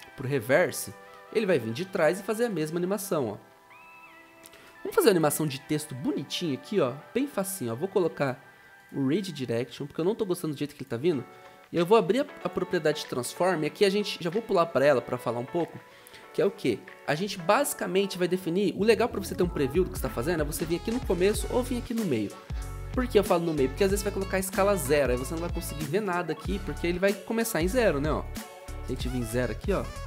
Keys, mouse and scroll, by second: 29.1 Return.